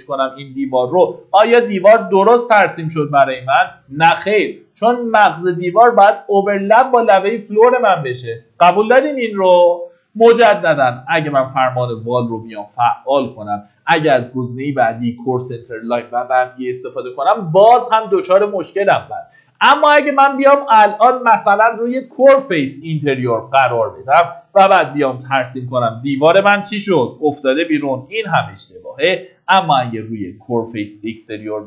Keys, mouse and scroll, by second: 1.6 Escape, 2.0-3.3 scroll up 1, 10.4-10.9 scroll down 1, 10.9 middle click, 11.1-12.0 typing, 13.4-23.8 drag, 23.8-24.3 scroll down 1, 24.3 middle click, 25.9 click, 27.0 Escape, 29.1 click, 31.4-31.6 scroll down 1.